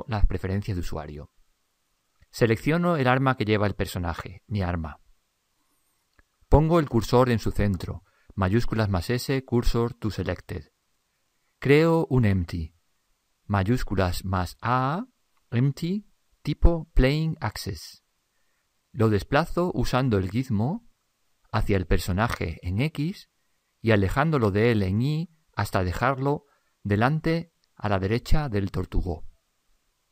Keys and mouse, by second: 1.6-4.2 middle drag, 4.2-6.1 right drag, 8.5 shift+s, 13.0 shift+a, 21.1 click, 22.8 click, 24.1-27.1 middle drag, 25.4 click, 28.5-30.1 middle drag.